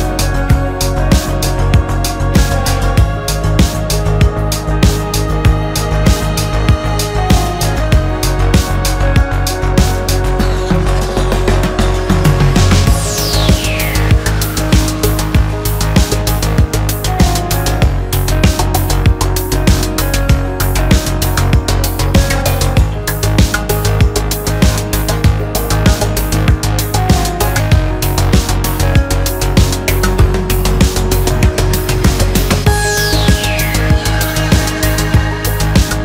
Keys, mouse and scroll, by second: 0.7-2.7 drag, 2.7-4.1 scroll down 6, 4.1-5.3 drag, 5.3-6.0 middle drag, 6.0-6.5 scroll up 1, 6.5-7.4 scroll up 10, 7.4-9.2 drag, 9.2 middle click, 9.6 scroll up 1, 9.8 Tab, 10.1-11.5 middle drag, 11.5 3, 11.8 click, 12.4 ctrl+KP_Add, 12.7 ctrl+KP_Add, 13.2 middle click, 13.9 ctrl+KP_Add, 14.1 ctrl+KP_Add, 14.4 ctrl+KP_Add, 14.6 ctrl+KP_Add, 15.4 click, 15.8 click, 16.1 Tab, 16.3 scroll down 4, 16.6 middle click, 16.8-17.5 scroll up 1, 17.5 click, 17.7-19.7 middle drag, 20.2 middle click, 21.8-23.3 scroll up 4, 23.3 click, 26.1-27.5 middle drag, 27.5-27.8 scroll up 2, 27.8 click, 28.4 click, 30.9-31.2 scroll down 3, 31.2-32.6 middle drag, 32.6 scroll up 2, 32.8-35.7 middle drag, 35.7-36.0 scroll up 1.